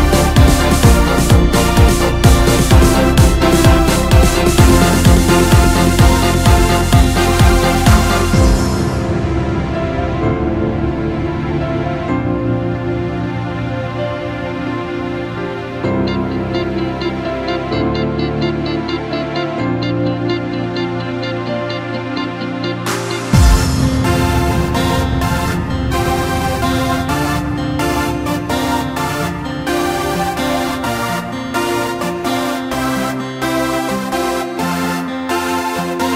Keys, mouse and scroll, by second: 0.0-1.6 drag, 1.7-4.8 drag, 4.8-6.9 middle drag, 6.9-7.5 drag, 7.5-10.5 middle drag, 11.3 click, 11.9-12.6 middle drag, 12.6-13.3 right drag, 13.3-15.1 middle drag, 15.1-15.9 scroll down 1, 15.9 KP_Divide, 19.5 KP_1, 21.2 r, 23.4 KP_3, 24.3-24.7 scroll up 1, 24.7-25.4 scroll down 3, 25.5-25.8 scroll up 2, 26.7 r, 31.6 shift+b, 34.1 r, 35.7-36.1 scroll down 11.